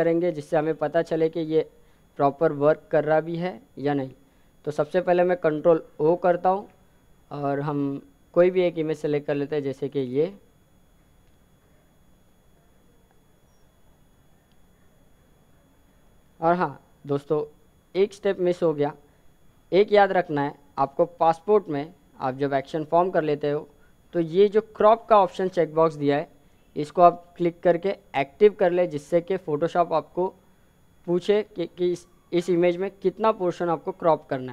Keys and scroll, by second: 5.7 ctrl+o.